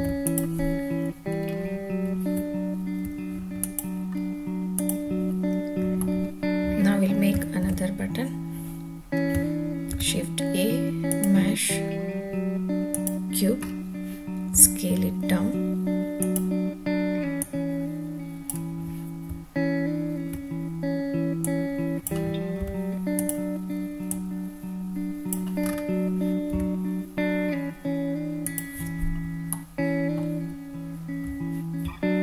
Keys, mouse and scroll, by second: 0.0 ctrl+s, 0.2 click, 1.5 scroll down 1, 2.5 `, 3.6 click, 4.1-4.7 scroll down 2, 4.7 click, 5.5-6.0 scroll down 1, 6.0-7.1 middle drag, 7.6 ctrl+s, 9.9 shift+a, 13.6-13.9 scroll down 2, 14.5 s, 16.2 click, 17.4-18.4 drag, 19.2 `, 21.4 click, 22.6 s, 23.2 drag, 24.1-25.3 drag, 25.6-26.0 scroll up 3, 26.5 s, 28.5 drag, 29.5-30.2 middle drag, 31.8 `.